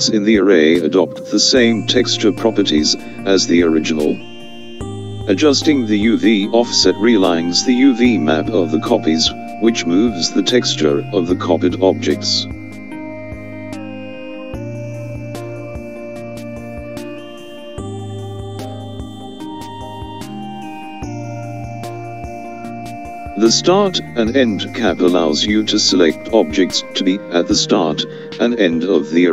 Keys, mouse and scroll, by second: 6.1-14.2 drag, 15.7-26.6 drag.